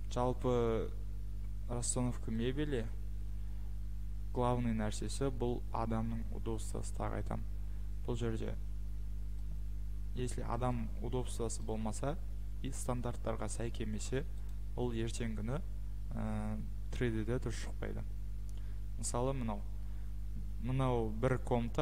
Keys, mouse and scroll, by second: 0.5 scroll, 4.9-5.5 scroll, 7.1-8.0 scroll, 9.5-9.9 scroll, 10.7 scroll, 13.7-14.5 scroll, 14.5 click, 17.6 scroll.